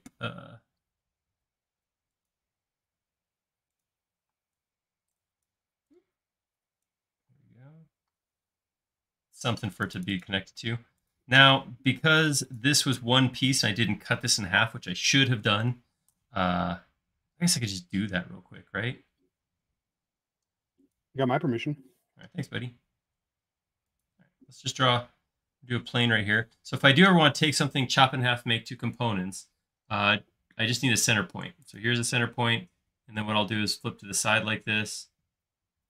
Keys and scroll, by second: 4.3 p, 7.4 space, 18.4 shift+q, 19.9 shift+q, 20.6 space, 22.3 l, 26.6 space, 29.9 l.